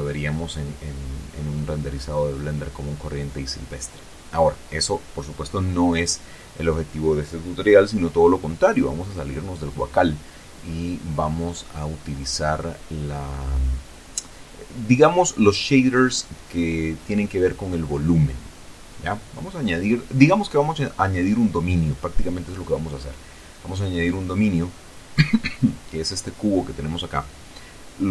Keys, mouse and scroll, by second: 7.7 Escape, 8.5-9.0 scroll down 2, 10.3-15.7 middle drag, 16.3-16.8 scroll down 2, 16.6 middle click, 18.1 shift+a, 20.3 click, 22.6-24.6 drag, 24.6 middle click, 25.5 s.